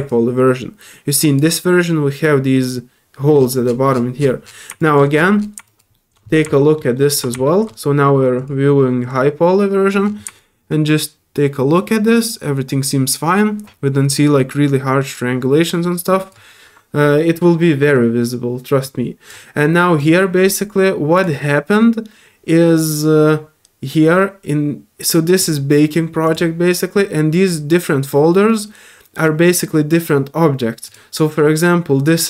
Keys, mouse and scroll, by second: 0.0-1.4 drag, 4.2 scroll down 1, 4.4 middle click, 4.8 alt+click, 5.1 alt+middle click, 5.6 alt+click, 5.9 alt+middle click, 6.5 alt+middle click, 6.9 alt+middle click, 7.4 alt+middle click, 8.3 alt+click, 9.0 alt+click, 10.3-16.3 drag, 16.5 alt+middle click, 18.8-19.3 alt+drag, 20.0 click, 21.1 click, 25.4 click, 26.2 click, 29.4 click, 30.8 click.